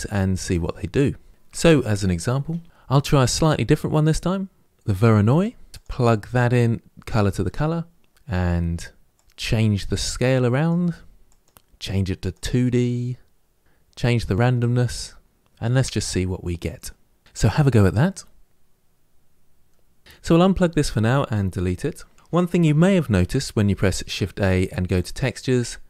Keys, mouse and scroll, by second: 7.3-20.0 drag, 20.6 click, 21.9 Delete.